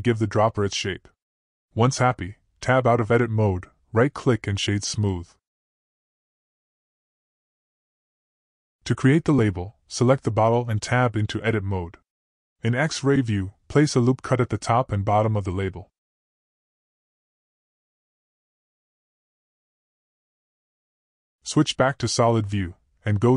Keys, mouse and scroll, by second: 2.1 ctrl+b, 4.6 Tab, 5.0-5.3 middle drag, 5.7 right click, 6.0 click, 6.4 click, 6.6 middle click, 6.6 click, 7.2-7.8 middle drag, 10.9 click, 11.4 Tab, 13.6 click, 16.4-17.7 drag, 19.0-21.6 drag, 23.0 click.